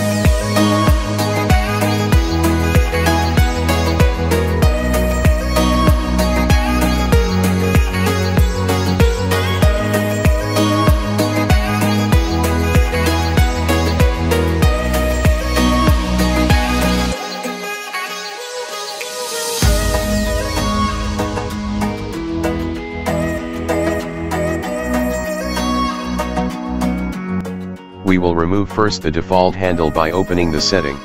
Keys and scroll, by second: 3.1 Escape, 6.3 Escape, 26.4 Escape.